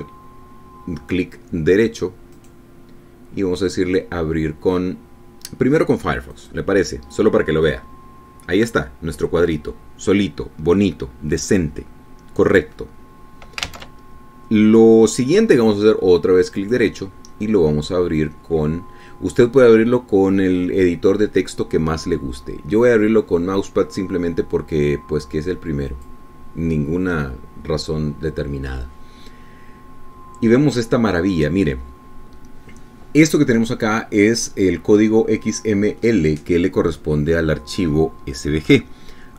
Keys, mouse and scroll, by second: 3.4 click, 7.4 click, 14.8 alt+Tab, 17.6 click, 27.0 click.